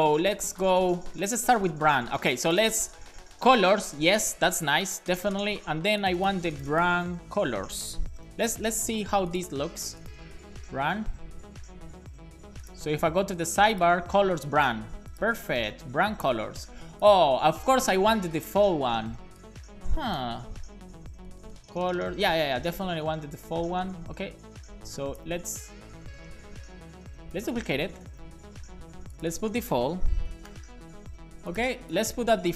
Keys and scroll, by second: 8.0-9.0 typing, 25.3 super+c, 28.0 Return, 28.3 super+v, 29.8-30.9 typing, 30.9 super+s.